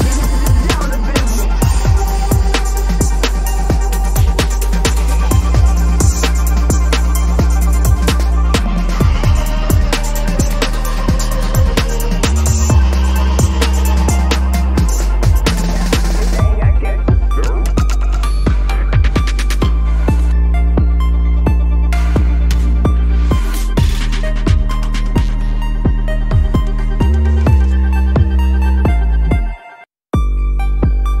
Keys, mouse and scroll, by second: 7.4 double click, 7.9 ctrl+-, 8.0 ctrl+-, 8.2 ctrl+-, 8.3 ctrl+-, 8.6 ctrl+-, 13.8 ctrl+-, 14.0 ctrl+-, 14.6 ctrl+=, 14.7 ctrl+=, 14.9 ctrl+=, 15.2 ctrl+=, 25.7-27.5 scroll down 1, 28.5 alt+click.